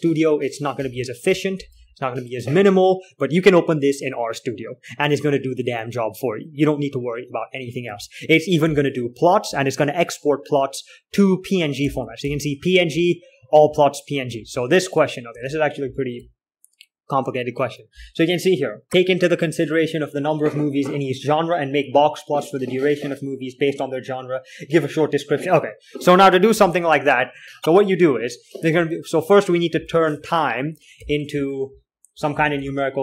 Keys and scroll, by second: 1.6-2.0 typing, 9.0-10.5 typing, 12.4-14.7 typing, 15.7 alt+Tab, 16.2-17.2 typing, 27.0 alt+Tab, 27.6 k, 29.1-30.0 typing, 31.4 ctrl+l, 31.6-33.0 typing.